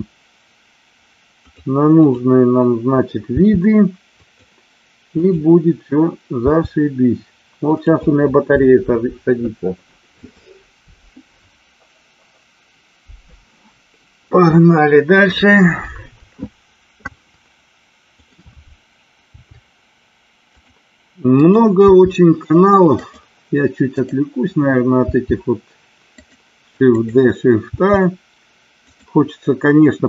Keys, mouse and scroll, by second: 0.2 g, 1.4 click, 3.3 g, 5.2-6.3 drag, 6.4 g, 18.1 click, 19.3 g, 20.4 click, 22.0 g, 22.9-24.6 drag, 25.1 g, 26.2 click, 26.9 click, 27.7 g, 28.8 click.